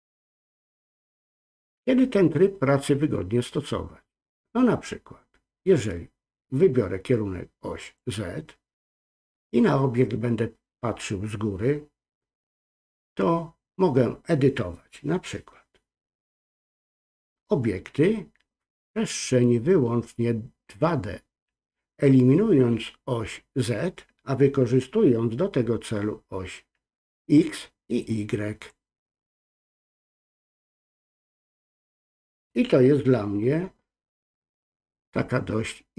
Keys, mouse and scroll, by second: 0.4 ctrl+z, 7.8 click, 28.1 click, 29.6 click, 31.1 ctrl+z.